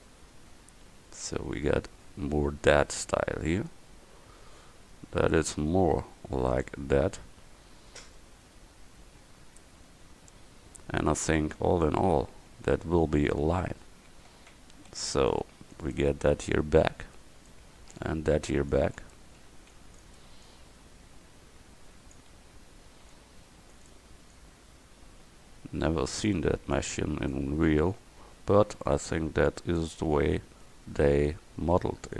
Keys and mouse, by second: 1.3 Tab, 5.1 middle click, 11.2 Tab, 11.7 a, 14.1 a, 14.6 a, 15.0 c, 16.3-20.5 drag, 17.9 a, 18.1 c, 19.6 c, 22.4 a, 24.4-25.6 drag, 25.9 click, 28.0 a, 28.4 c, 29.8-31.3 drag.